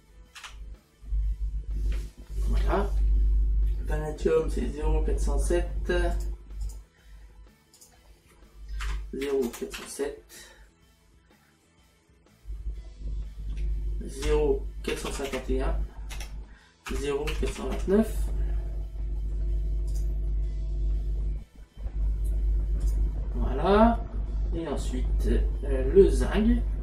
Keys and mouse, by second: 0.9 m, 6.2 click, 7.8 click, 14.2 KP_Decimal, 16.2 Tab, 20.0 click, 22.9 click.